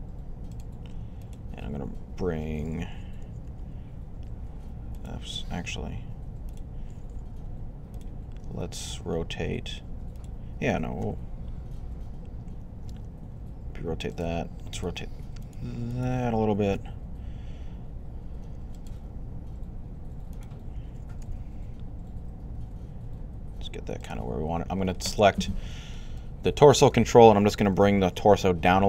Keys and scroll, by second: 1.3 y, 5.2-5.9 typing, 7.2 r, 10.8 r, 16.6 r, 21.0 g.